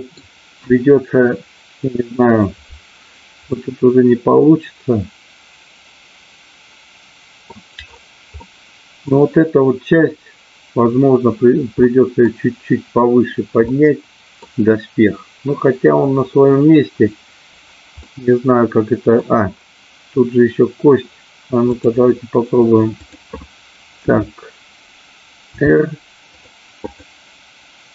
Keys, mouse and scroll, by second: 3.5-7.5 middle drag, 8.4 middle click, 11.8-12.3 scroll up 2, 13.7 middle click, 14.4-15.7 scroll down 2, 18.0-19.2 middle drag, 21.7 click, 22.9-24.0 drag, 25.4 r, 26.8-27.9 drag.